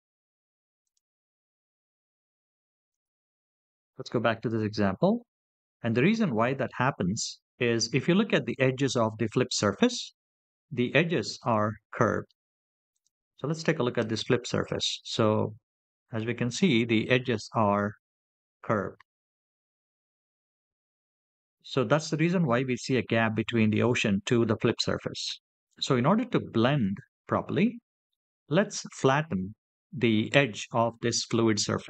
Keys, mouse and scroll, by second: 4.8-5.7 scroll up 4, 5.7-6.4 middle drag, 7.0-8.0 scroll up 4, 8.0-8.8 scroll up 1, 10.3-11.2 scroll up 3, 11.2 click, 12.7 click, 14.1 Tab, 14.9-16.8 middle drag, 19.4-19.8 scroll down 5, 20.4 Tab, 20.9 scroll down 2, 21.6 middle click, 25.1 scroll down 3, 26.1-26.6 shift+middle drag, 27.9 middle click.